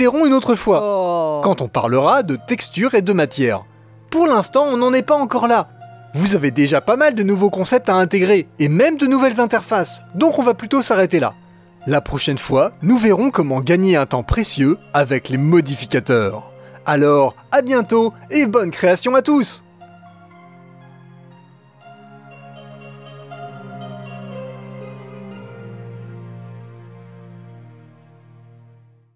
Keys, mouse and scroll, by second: 7.0 click, 7.3 Delete, 7.7-14.1 drag, 14.2-15.2 middle drag, 15.2 click, 16.7-18.2 drag, 19.6 click, 20.2 middle click, 20.8-22.3 drag, 22.9-25.9 drag, 25.9-29.1 middle drag.